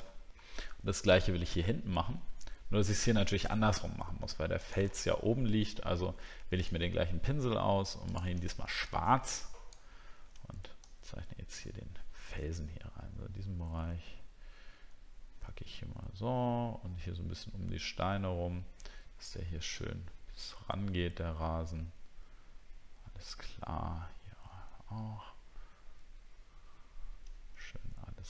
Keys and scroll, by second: 0.1 alt+scroll up 1.